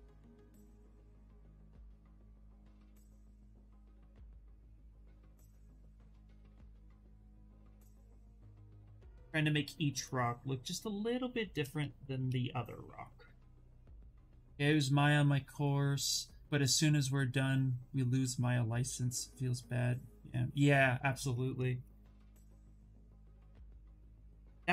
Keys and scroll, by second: 12.1 s.